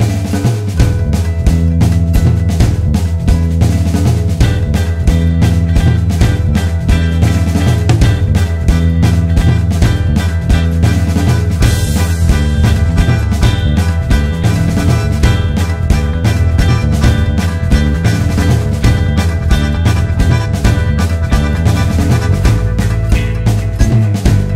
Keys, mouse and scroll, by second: 0.4 click, 0.6-1.7 scroll down 1, 2.0 scroll up 1, 2.2 `, 3.8 Tab, 7.4 alt+a, 12.3 click, 12.5 alt+s, 14.0 shift+click, 14.2 `, 14.6 2, 15.0 1, 15.2 click, 15.6 scroll down 1, 15.8 `, 16.2-16.8 scroll up 1, 17.2 ctrl+KP_Add, 18.2 `, 18.7 2, 18.8 3, 19.1-19.7 scroll up 1, 19.7 alt+shift+click, 21.9 ctrl+z, 22.3 alt+shift+click, 23.0 `, 23.6-24.0 scroll up 1.